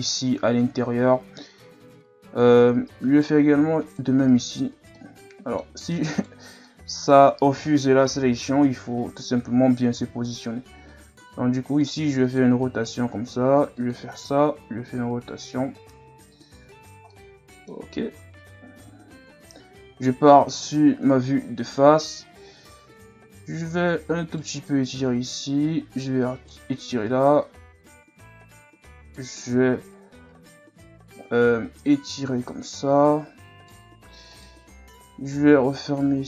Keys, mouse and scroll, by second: 3.0 alt+right click, 3.8 alt+right click, 4.3 alt+right click, 4.9-6.1 middle drag, 6.1 alt+right click, 6.7 middle click, 7.6 ctrl+KP_Add, 8.6 KP_3, 10.0 r, 12.6 g, 14.1 r, 16.5 z, 16.8 scroll down 3, 17.1 middle click, 17.9 Tab, 19.3 KP_1, 20.0-20.4 scroll up 3, 21.0-21.7 ctrl+scroll up 3, 21.8 Tab, 23.6 right click, 24.9 right click, 27.1 right click, 29.4-29.7 scroll down 4, 29.8 Tab, 30.3 scroll up 1, 30.6 Tab, 31.3 right click, 34.3 alt+right click, 35.0 s.